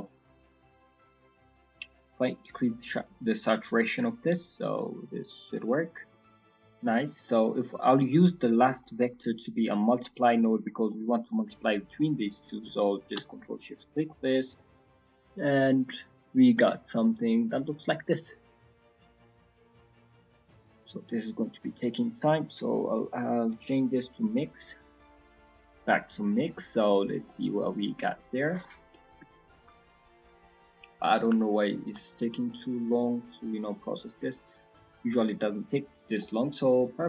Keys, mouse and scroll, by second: 3.2 click, 5.8-6.1 scroll down 5, 6.0 middle click, 6.5 middle click, 6.9 middle click, 7.2 middle click, 7.6 middle click, 7.9-8.6 scroll up 1, 8.6 click, 8.6 scroll up 2, 10.6 scroll down 3, 10.9 middle click, 11.3-11.8 scroll down 3, 12.0-12.6 scroll up 4, 13.0 ctrl+shift+click, 13.6-14.2 scroll down 2, 14.0 middle click, 15.8 middle click, 19.7 middle click, 20.4-21.4 scroll up 3, 20.8 middle click, 21.4 middle click, 22.2 scroll up 2, 23.0 click, 25.1 middle click, 26.0 middle click, 26.0-26.5 scroll down 5, 26.5 middle click, 26.8-27.2 scroll up 4, 27.2 middle click, 27.8 middle click, 29.3 shift+middle click, 29.4 shift+middle click, 33.1 middle click, 33.7-34.1 scroll down 3, 34.0 middle click, 34.3-34.6 scroll up 2, 34.6 middle click, 35.1 middle click, 35.9-36.3 scroll down 2, 36.2 middle click.